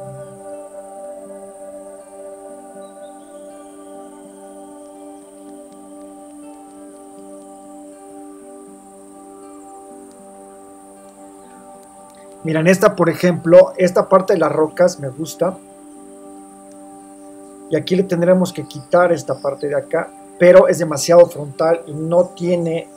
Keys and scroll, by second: 1.1 super+c, 2.2 super+t, 2.3 super+-, 3.3 Return, 8.9 super+c, 9.7 alt+shift+super+v, 10.0 shift+super+t, 10.9 shift+Return.